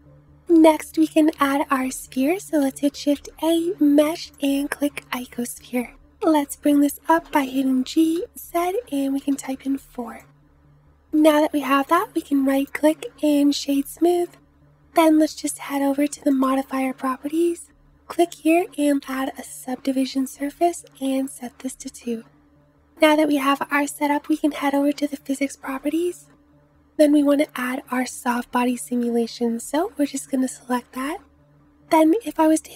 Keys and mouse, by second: 0.0-1.6 drag, 0.8 Delete, 2.5 shift+a, 7.2 g, 12.0-16.4 drag, 16.4 middle click, 16.5-18.5 drag, 18.5-25.0 middle drag, 25.0-28.3 drag, 28.3-32.7 middle drag, 32.2 space.